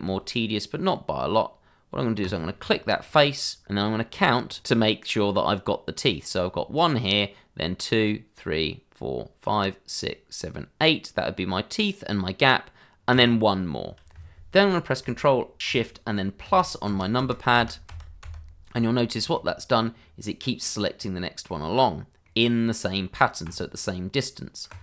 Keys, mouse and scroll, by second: 2.2 click, 2.6 shift+middle click, 2.7 middle click, 2.8 shift+middle click, 3.0 shift+scroll up 2, 13.1 click, 16.4 ctrl+shift+KP_Add, 19.0 scroll down 1, 19.3 middle click, 21.8-22.2 scroll up 1, 22.2 middle click, 24.7 click.